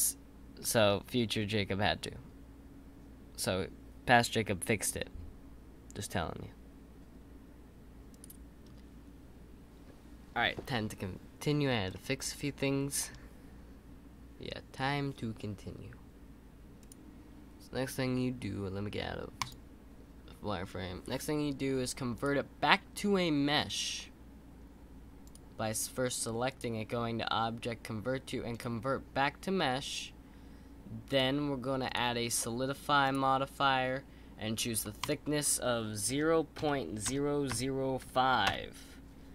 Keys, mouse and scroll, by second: 11.9-15.0 middle drag, 19.4 click, 22.1-25.3 drag, 26.5-29.6 drag, 31.1 click, 31.8-38.2 drag.